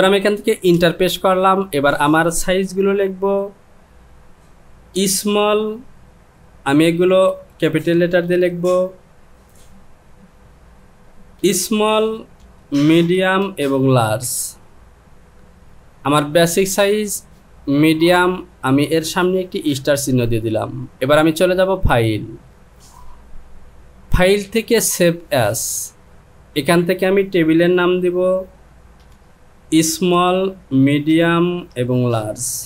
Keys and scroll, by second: 0.8 Return, 14.1 l, 29.1 s, 31.7 KP_Subtract.